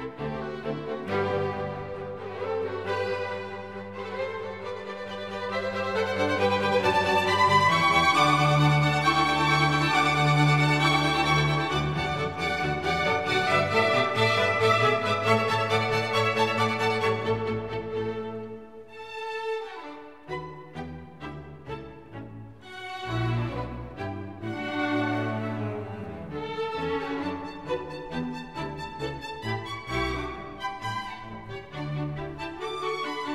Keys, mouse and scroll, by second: 0.2 shift+z, 6.2-7.8 drag, 9.6-21.3 drag, 28.9-32.3 middle drag.